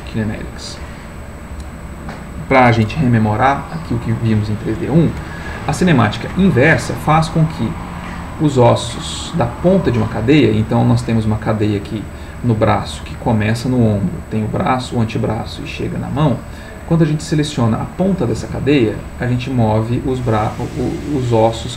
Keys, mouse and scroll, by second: 7.7 click, 18.4 g.